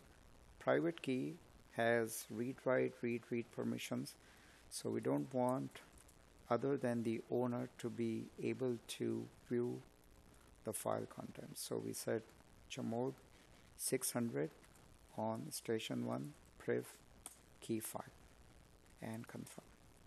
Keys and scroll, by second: 2.4 space, 7.0 Tab, 7.9 Tab, 19.1 space.